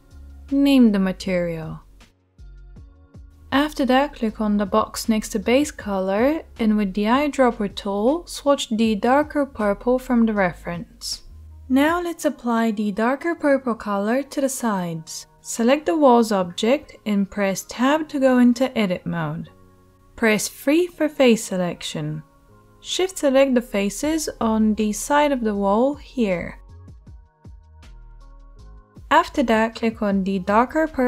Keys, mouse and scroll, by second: 5.5-23.5 middle drag, 17.5 Tab, 19.8 3, 23.5 shift+click, 23.7-31.0 middle drag, 25.3 shift+click.